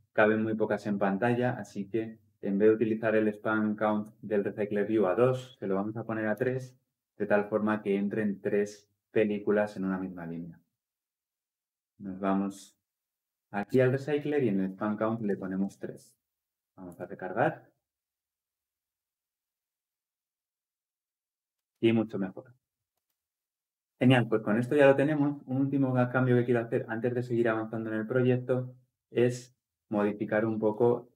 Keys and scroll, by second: 16.8 ctrl+F10.